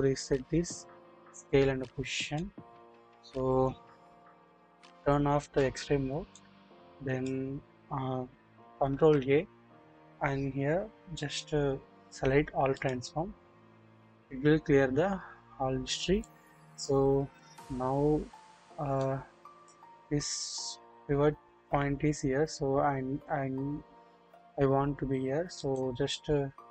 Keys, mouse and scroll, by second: 2.3 click, 5.3 alt+z, 6.3-7.3 drag, 8.9 ctrl+a, 16.2 middle click, 19.0 middle click, 19.9-22.6 scroll down 1, 25.6-26.7 drag, 25.6 right click.